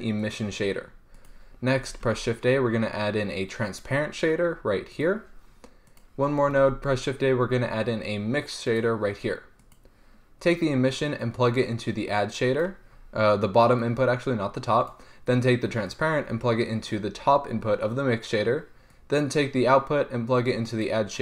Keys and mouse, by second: 1.4-5.3 drag, 2.1 shift+a, 6.2-9.0 drag, 6.8 shift+a, 9.9-10.7 drag, 14.0 click.